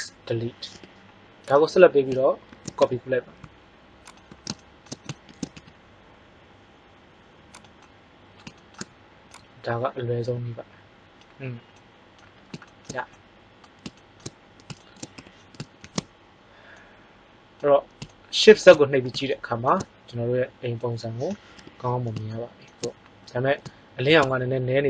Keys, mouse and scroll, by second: 0.6 KP_1, 2.4 shift+d, 5.2 shift+d, 15.3 KP_1, 15.8 shift+z, 21.5 KP_1, 24.1 shift+z.